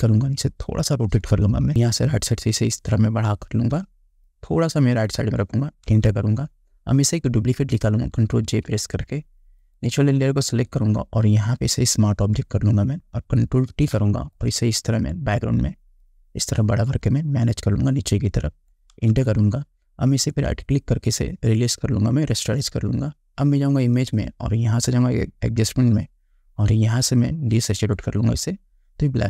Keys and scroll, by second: 6.0 Return, 8.6 ctrl+j, 13.8 ctrl+t, 19.1 Return.